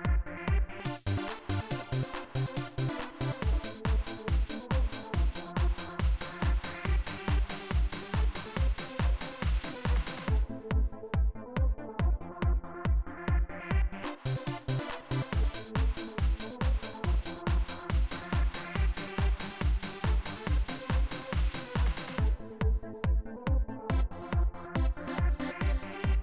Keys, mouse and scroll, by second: 0.6 click, 3.5-5.2 drag, 6.1-7.2 drag, 7.6-9.2 drag, 10.6 click, 11.7-13.0 drag, 13.8 click, 22.0 click, 23.5 click, 25.6 click.